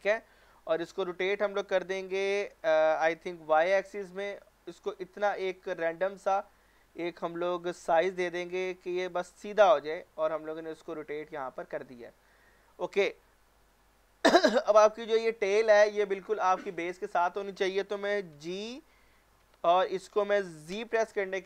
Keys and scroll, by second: 1.8-3.5 typing, 19.4 g, 20.7 z.